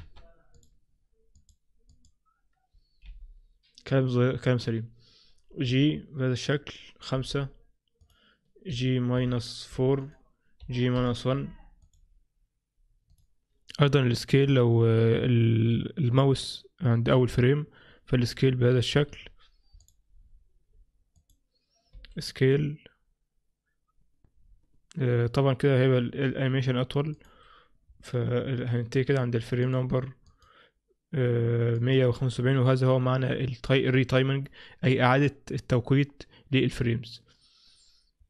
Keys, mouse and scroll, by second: 19.9 click, 21.3 click, 27.9-28.7 scroll down 2, 29.1-29.7 scroll down 8, 29.7 click, 30.3 click, 31.8 click.